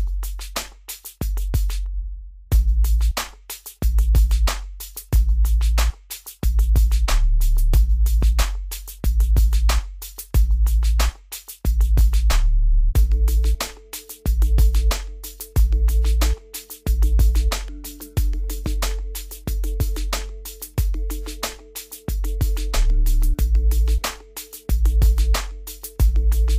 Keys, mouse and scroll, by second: 0.4 click, 3.9 click, 4.9-5.3 scroll up 1, 5.3-6.2 scroll down 1, 10.8 click, 12.2-12.6 scroll down 1, 14.0 click, 16.8 click, 20.1 Escape, 21.0 scroll up 1, 22.0 scroll, 22.1 scroll down 1, 23.6 click, 25.3 scroll down 1, 26.0-26.5 scroll down 1.